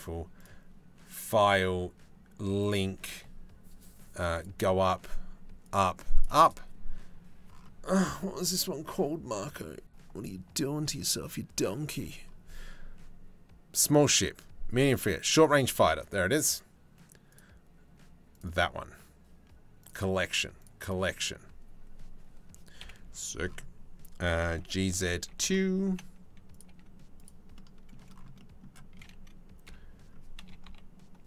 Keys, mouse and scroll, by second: 0.9-2.5 drag, 22.4 KP_7, 24.2 g, 26.2 g, 26.2 r, 29.2 KP_Decimal, 30.2 KP_3.